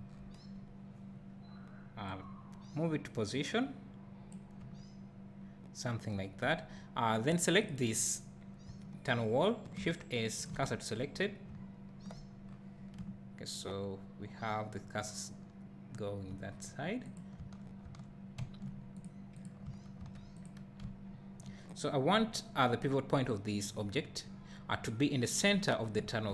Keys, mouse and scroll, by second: 0.0 KP_1, 0.5 scroll up 1, 4.6 `, 10.5 shift+s, 11.2 scroll down 1, 11.9 `, 12.5 scroll down 1, 13.0 `, 16.5 scroll up 1, 17.1 click, 17.4 Tab, 18.4 `, 19.0 click, 19.6 Tab, 20.4 click, 20.8 `, 21.8 click, 22.1 scroll up 1, 25.9 `.